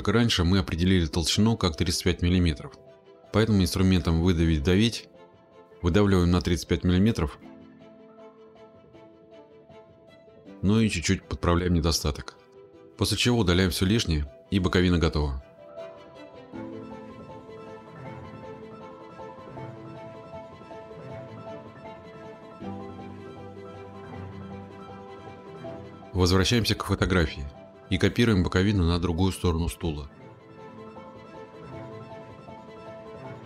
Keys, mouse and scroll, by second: 1.2 click, 8.6-9.3 typing, 9.9 click, 10.3-11.3 scroll, 12.6 middle click, 13.7-14.5 scroll, 16.4 middle click, 16.8 click, 17.3 click, 18.2 click, 18.5 click, 18.7 click, 18.9 middle click, 19.1 right click, 19.5 click, 20.2 middle click, 20.4 click, 20.7 Delete, 21.1 click, 21.7 click, 22.1 click, 22.6-23.5 middle click, 22.8 click, 22.9-23.3 scroll, 23.3 click, 23.7 click, 24.1 click, 24.4 scroll, 24.9 click, 25.3 click, 25.7 click, 26.2 click, 32.2 click.